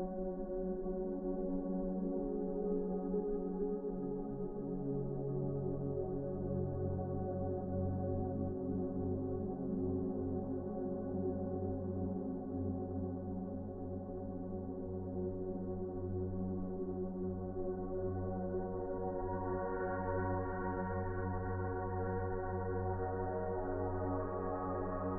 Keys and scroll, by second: 5.0 F4, 10.1 z, 23.3 1.